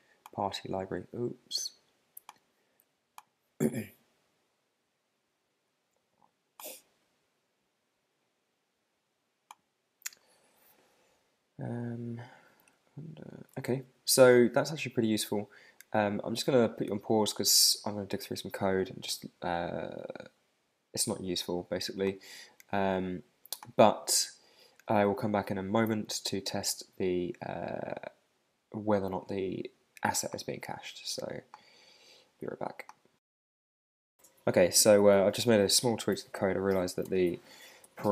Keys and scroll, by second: 12.6 super+Tab, 13.5 shift+super+Tab, 36.1 super+s, 37.0 super+Tab.